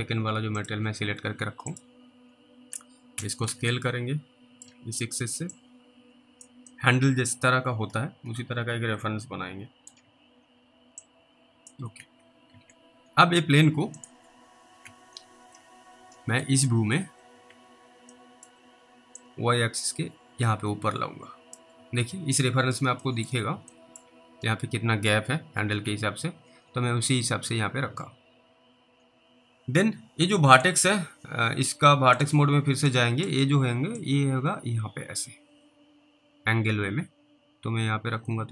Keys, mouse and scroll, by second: 2.3-2.7 scroll up 1, 3.2 scroll up 1, 4.0 alt+middle click, 5.8 click, 7.0 alt+middle click, 11.3 click, 12.0 alt+w, 12.5 alt+w, 13.0-13.5 scroll up 1, 14.0 click, 14.9 w, 15.5 alt+w, 16.0 alt+w, 16.7 middle click, 17.0-17.3 scroll down 2, 17.5 alt+w, 18.4 alt+middle click, 19.5 click, 22.0 alt+w, 22.7 alt+middle click, 23.3 middle click, 23.3 scroll down 2, 24.0 alt+middle click, 24.2 scroll up 2, 24.4 scroll down 1, 25.9 alt+w, 26.9-27.3 scroll up 1, 30.6 click, 33.2 click, 34.3 click.